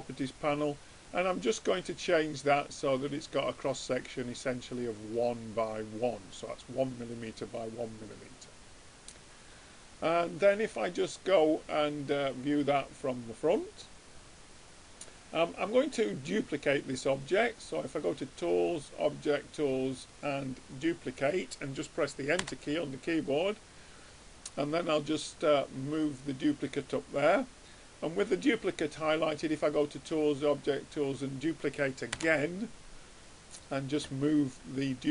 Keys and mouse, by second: 0.3-4.6 middle drag, 4.9-8.3 middle drag, 10.0-12.3 drag, 18.2-19.9 drag, 24.1-25.7 drag, 29.4-31.2 drag, 33.8-35.1 drag.